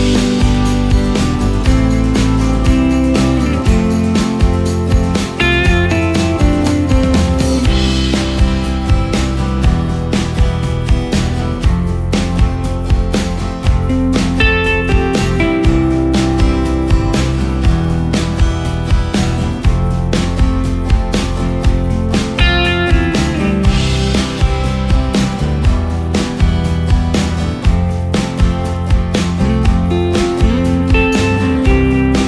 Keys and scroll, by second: 0.0 BackSpace, 0.4 Return, 1.8 BackSpace, 2.1 Return, 3.4 space, 16.8 space, 18.6 ctrl+space, 22.7 space, 28.9 ctrl+space, 29.9 ctrl+space, 30.6 ctrl+space, 31.7 ctrl+space.